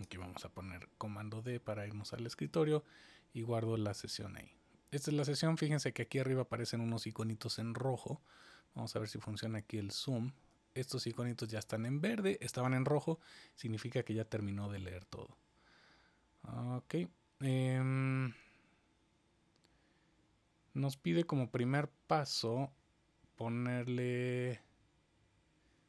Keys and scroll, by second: 0.0 super+d.